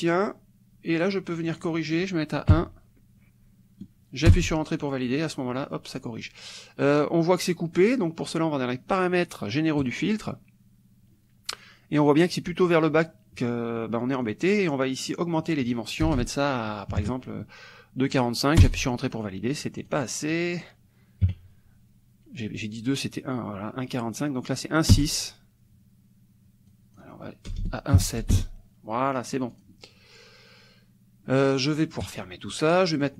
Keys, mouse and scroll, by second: 1.3 click, 2.5 KP_1, 4.3 Return, 9.8 click, 14.3 click, 15.1 click, 16.1 BackSpace, 16.9 KP_4, 18.6 Return, 19.8 click, 20.3 click, 21.3 KP_6, 25.0 Return, 26.7 click, 27.5 BackSpace, 28.0 KP_7, 28.3 Return, 29.5 click, 32.1 click, 32.5 click, 32.9 middle click.